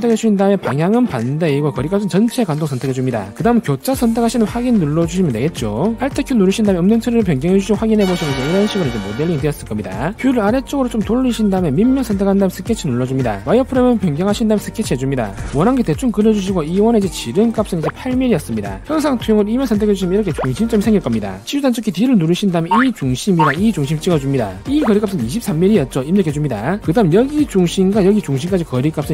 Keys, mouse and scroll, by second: 0.7 click, 1.7 click, 3.2 click, 4.4 click, 5.6 click, 7.3 alt+q, 11.0 shift+middle click, 12.0 middle click, 12.8 click, 14.6 alt+w, 16.3 click, 16.8 click, 17.3 d, 17.4 click, 17.8 click, 20.4 click, 21.7 d, 22.6 click, 23.8 click, 26.1 2, 26.3 3, 27.0 d, 28.0 click, 29.0 click.